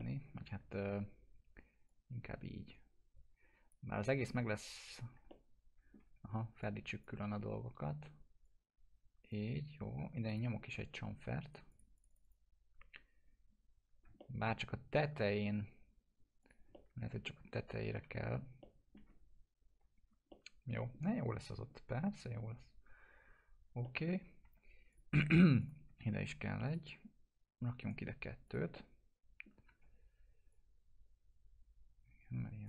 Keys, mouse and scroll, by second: 0.0-0.6 alt+middle click, 0.8 ctrl+z, 1.9-3.7 drag, 5.3-6.2 alt+middle click, 6.2 w, 6.6-7.3 click, 7.1 e, 8.4-9.4 drag, 11.5 right click, 11.7 click, 14.2-15.1 alt+middle drag, 16.4 click, 16.7-17.4 alt+middle drag, 18.0 1, 18.6-19.2 alt+middle drag, 19.9 scroll down 1, 20.3-20.9 alt+middle drag, 22.1 scroll up 1, 23.8 middle click, 24.1 scroll down 1, 24.4 2, 24.9 click, 25.6 shift+click, 26.7 click, 27.8 right click, 28.5 click, 28.8-29.7 alt+middle click, 29.7 w, 30.5-32.6 drag.